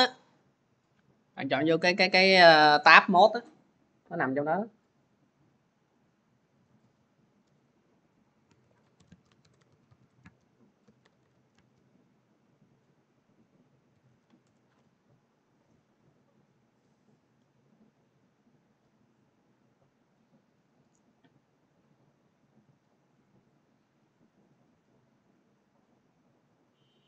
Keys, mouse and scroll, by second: 6.6-9.1 drag, 8.1-9.4 typing, 10.6-11.7 typing, 14.0-15.4 typing.